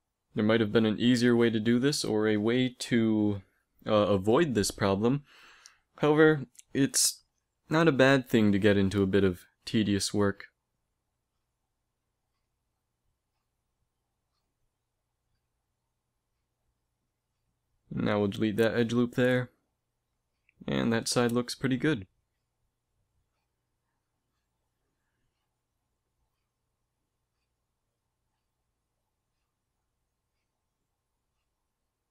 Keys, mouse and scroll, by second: 0.2-2.0 middle drag, 1.9 x, 3.7 z, 4.5 ctrl+Tab, 5.7-7.3 right drag, 6.0 x, 8.4 a, 10.3 ctrl+Tab, 11.9 z, 12.2 right click, 13.8 x, 16.5 ctrl+Tab, 17.8-19.4 right drag, 18.1 x, 19.5 z, 27.1 z, 27.7 ctrl+Tab, 28.9 click, 30.0-32.1 right drag.